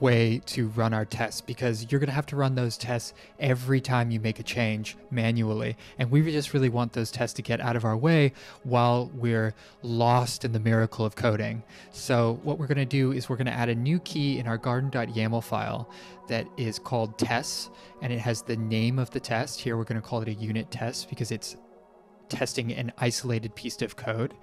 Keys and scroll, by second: 11.9 p.